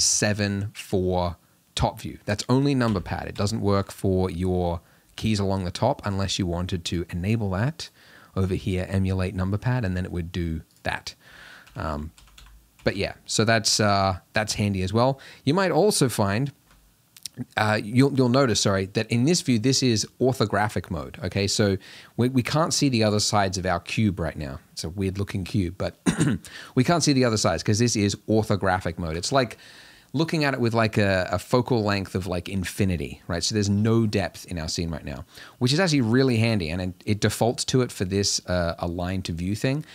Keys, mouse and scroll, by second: 2.9 KP_1, 3.3 KP_3, 7.0-11.0 drag, 11.7-12.9 typing.